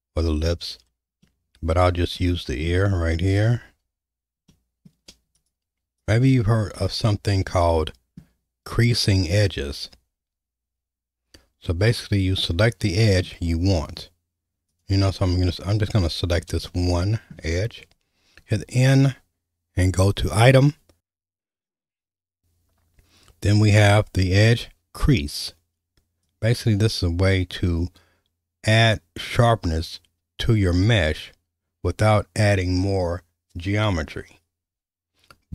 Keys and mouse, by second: 1.2 middle click, 2.2 shift+middle click, 4.5 middle click, 5.4 shift+click, 7.5 middle click, 9.4-13.2 middle drag, 15.8 middle click, 16.7 shift+middle click, 18.4 n, 26.3-30.9 drag.